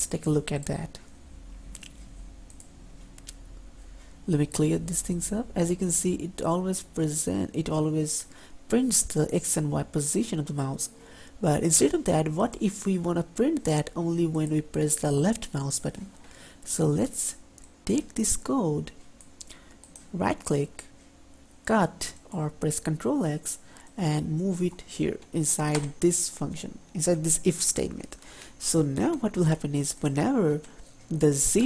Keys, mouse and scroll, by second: 3.8-4.5 typing.